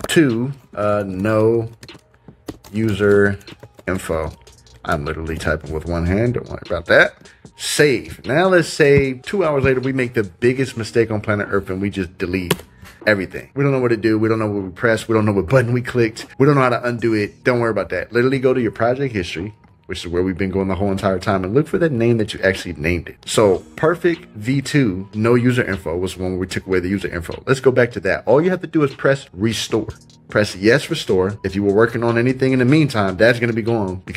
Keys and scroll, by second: 5.2 shift+), 12.4 BackSpace.